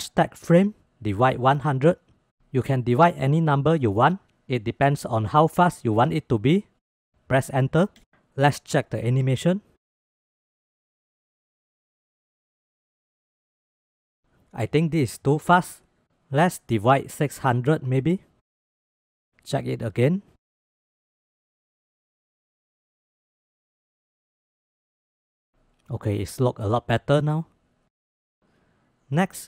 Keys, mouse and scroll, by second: 2.0 0, 9.0-9.5 drag, 9.6 space, 14.8 space, 15.7-18.7 drag, 19.7-20.3 drag, 20.3 space.